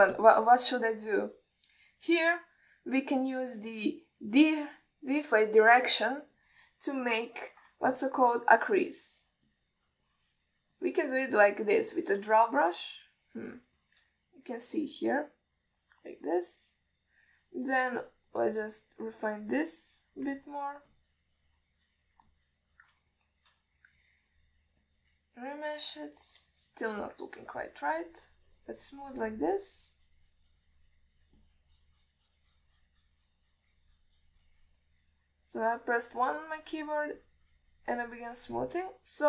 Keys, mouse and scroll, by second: 0.1-0.7 alt+middle drag, 1.0 shift+click, 5.7 click, 7.6 alt+middle click, 8.3 f, 9.2 ctrl+middle click, 9.5 alt+middle click, 9.9 click, 10.8 alt+middle click, 11.3 click, 12.0 middle click, 13.2 alt+shift+middle click, 15.3 KP_1, 17.0 click, 17.4 click, 17.8 click, 19.0 click, 19.6 click, 20.3-21.5 drag, 21.7 middle click, 22.2-23.3 drag, 23.6 middle click, 24.8 KP_1, 25.6-26.5 drag, 28.0-31.0 shift+drag, 32.7-36.0 shift+drag, 36.8-38.1 shift+drag, 38.5-39.2 shift+drag.